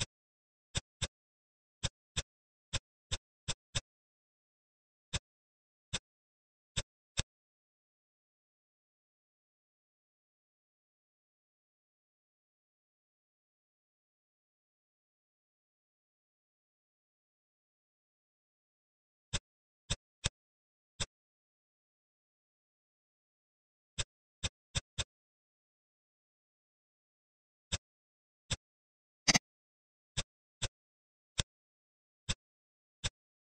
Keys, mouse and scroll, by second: 0.6 shift+click, 0.9 middle click, 1.7 shift+click, 2.0 middle click, 2.6 shift+click, 2.9 shift+click, 3.3 shift+click, 3.6-5.0 middle drag, 5.0 shift+click, 5.8 middle click, 6.6 drag, 10.1 ctrl+z, 11.0-11.6 ctrl+z, 12.6 ctrl+shift+z, 12.8 ctrl+shift+z, 13.3 ctrl+shift+z, 14.3 shift+z, 14.9 shift+z, 15.9 ctrl+shift+z, 16.2 ctrl+shift+z, 16.3 ctrl+shift+z, 16.4 ctrl+shift+z, 16.9 shift+z, 17.5 shift+z, 17.6 shift+z, 18.1 shift+z, 18.7 ctrl+shift+z, 18.9 ctrl+shift+z, 19.1 click, 19.8 click, 20.1-21.0 middle drag, 21.0 click, 23.8 click, 24.2 shift+click, 24.9 shift+click, 25.5 i, 28.3 middle click, 29.2 click, 30.0 click, 30.4 click, 31.3 ctrl+click, 32.2 ctrl+click, 32.9 shift+click.